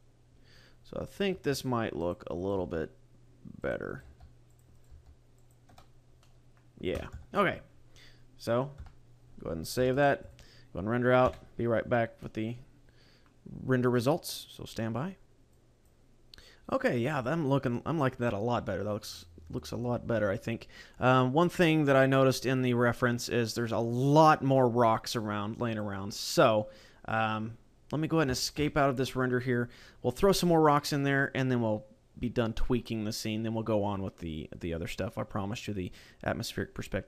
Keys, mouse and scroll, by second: 1.1 right click, 1.3 g, 2.1 click, 2.3 right click, 2.5 g, 3.6 click, 3.9 right click, 4.0 g, 4.5 click, 4.7 right click, 4.9 g, 5.5 click, 5.7 Tab, 6.1 middle click, 7.1 KP_0, 7.7-8.1 scroll down 4, 8.7 KP_0, 9.9 shift+s.